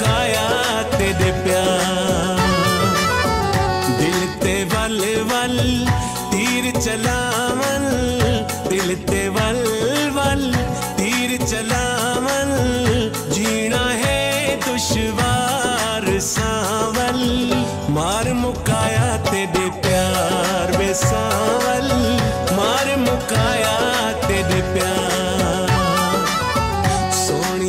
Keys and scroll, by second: 3.9 Left, 13.7 ctrl+s, 15.7 ctrl+s, 19.8 ctrl+s, 23.2 ctrl+a, 24.0 space.